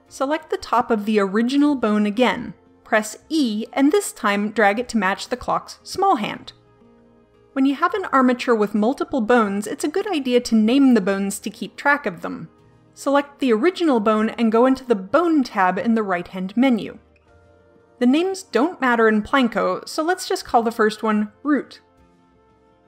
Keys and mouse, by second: 0.3-1.5 middle drag, 1.5-2.5 right drag, 2.8 KP_7, 3.5 e, 11.4-13.7 middle drag, 13.7-16.1 right drag, 16.7-21.4 drag, 21.4 o.